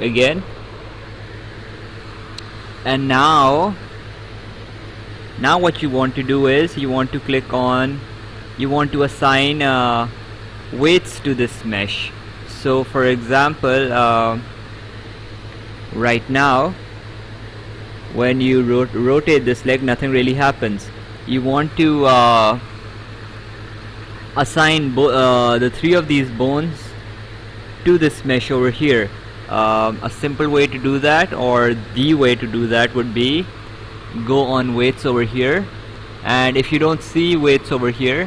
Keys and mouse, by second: 0.5 click, 5.2 right click, 8.2 right click, 12.0 right click, 17.0 Escape, 17.7 click, 21.3 ctrl+z, 24.9 click, 26.0 click, 32.7 Escape, 35.5 click.